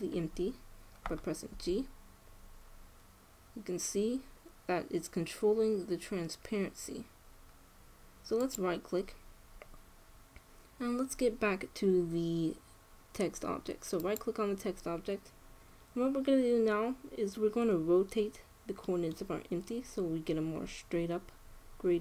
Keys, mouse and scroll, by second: 2.4 g, 14.7-16.5 right drag, 18.7-21.4 middle drag.